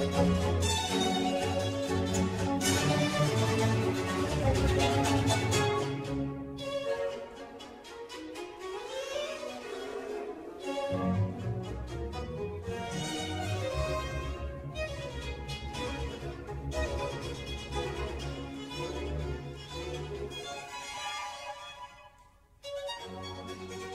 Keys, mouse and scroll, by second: 1.8 click, 4.4 click, 5.2-8.2 middle drag, 8.2-9.2 drag, 9.9-13.0 middle drag, 13.0-16.1 drag, 21.5-22.6 scroll down 2.